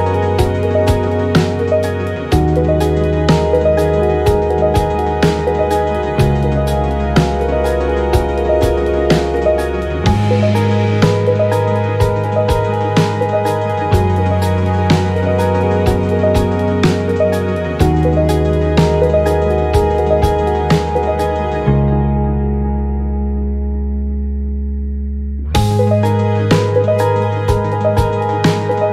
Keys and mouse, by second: 2.0 click, 3.1-6.8 drag, 7.5 click, 9.5-15.3 drag, 16.6 click, 20.8-25.3 drag, 27.3-28.9 drag.